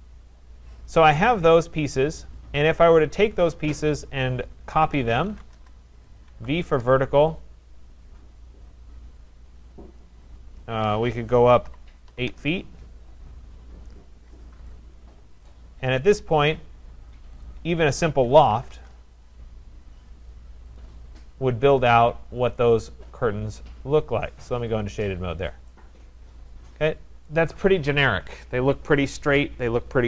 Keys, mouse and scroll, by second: 0.0 scroll, 1.3 click, 2.5 scroll, 4.7-6.9 typing, 6.4 middle click, 9.3 click, 11.4-12.3 typing, 13.7 middle click, 13.7 Return, 13.7-14.3 scroll, 14.6 Return, 15.6 click, 16.4 click, 17.5 shift+click, 17.5 middle click, 17.5 shift+click, 18.0-19.2 typing, 20.3 click, 20.3 typing, 20.8 click, 21.1 Return, 21.1 scroll, 22.6 click, 24.7 click, 25.0 middle click, 25.4 middle click, 25.5 middle click, 27.3 right click, 27.7-28.1 scroll.